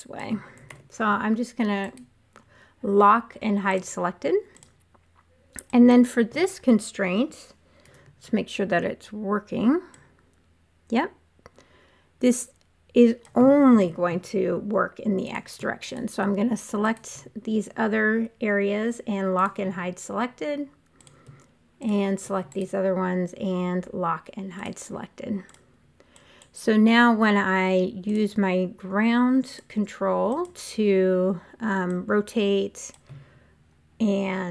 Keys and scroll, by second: 0.6 super+z, 7.7 e, 13.7 super+z.